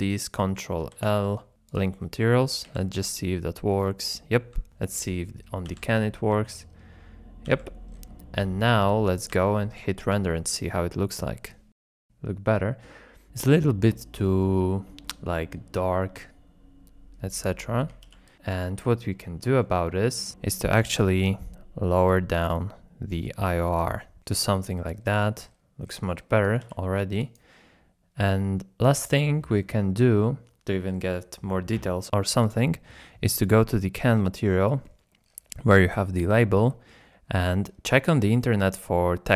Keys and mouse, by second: 2.7 z, 4.4 z, 4.9 click, 5.7 z, 7.5 z, 9.3 z, 15.2 shift+middle click, 19.1 ctrl+shift+click, 20.3 ctrl+shift+drag, 22.1-24.7 shift+drag, 29.7 shift+click, 30.6 z, 32.4 click, 35.0 middle click, 36.2 middle click, 37.0 middle click.